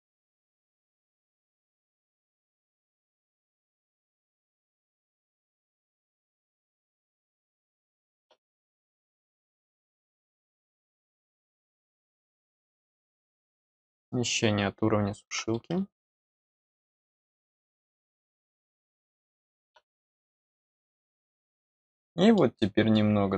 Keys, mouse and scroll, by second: 0.4 middle click, 7.1 click, 9.3 click, 9.5 click, 11.0 middle click, 11.0 scroll down 1, 11.8 click, 13.2 click, 14.2 click, 20.2-21.4 middle drag, 21.9 middle click, 22.9 middle click.